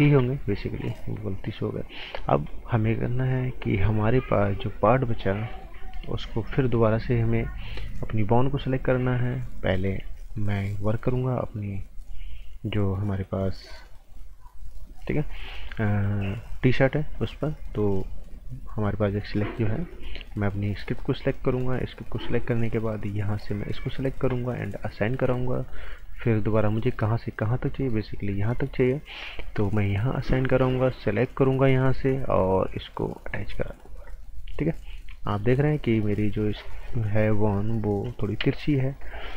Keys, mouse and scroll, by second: 0.0 ctrl+z, 0.9 right click, 1.3 scroll up 1, 1.4 right click, 1.8 scroll down 1, 2.0 right click, 2.3 scroll up 1, 2.4 right click, 8.1 click, 8.7 scroll down 1, 9.1-9.7 scroll up 1, 9.7 right click, 10.3 alt+right click, 11.2 scroll up 1, 11.4 right click, 19.9 click, 20.3 scroll up 1, 20.6 right click, 22.8 click, 23.7 scroll down 1, 23.9 right click, 25.0 click, 25.5 right click, 27.8 click, 34.2 right click, 34.9 scroll up 1, 35.1 right click, 35.7 scroll up 1, 35.9 right click, 36.4 scroll up 1, 36.6 right click, 38.4 t, 38.8-39.3 scroll up 1.